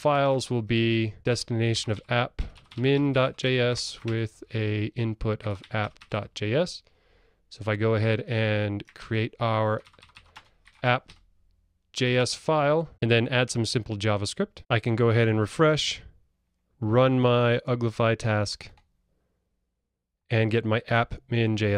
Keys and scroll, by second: 1.2 Delete, 9.2 super+n.